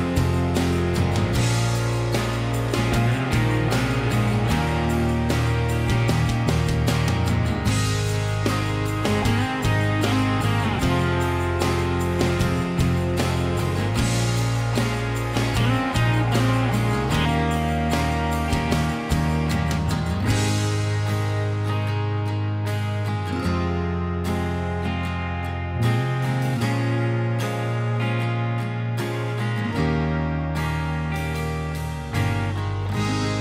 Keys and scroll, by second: 0.5 m, 3.3-6.4 typing, 4.9 Return, 8.7 Escape, 8.8 Escape, 9.2 Escape.